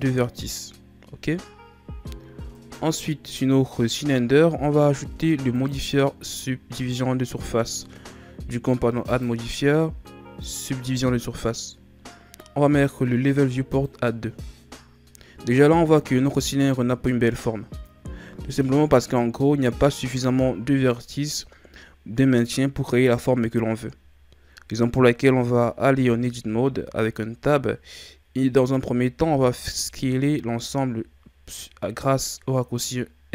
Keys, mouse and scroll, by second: 2.5 right click, 3.7-4.9 ctrl+scroll up 2, 5.5 click, 9.0-12.1 drag, 13.7-16.0 drag, 16.0-17.5 scroll up 1, 17.5-20.5 scroll up 1, 25.9 Tab, 29.3 s.